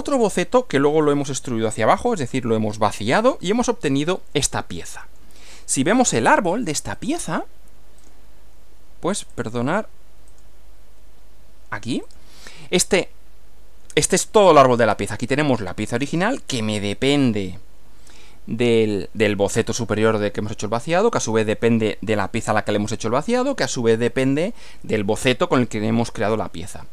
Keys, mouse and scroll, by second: 4.2-5.4 middle drag, 6.9 click, 8.0 click, 9.3 click, 10.3 click, 12.1 click.